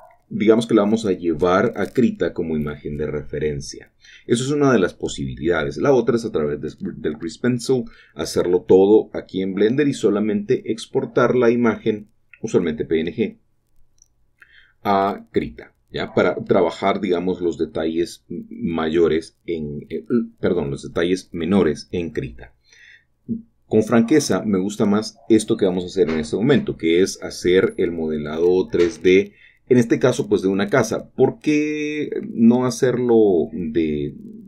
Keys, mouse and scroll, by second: 2.3 shift+middle click, 3.2-7.3 shift+middle drag, 7.4-10.0 drag, 11.0 typing, 13.4 typing, 17.2-18.5 shift+drag, 18.5 typing, 23.2 typing, 23.3-26.6 shift+drag, 27.0-28.6 shift+drag, 27.0 typing, 28.6 typing, 32.4-34.4 shift+drag.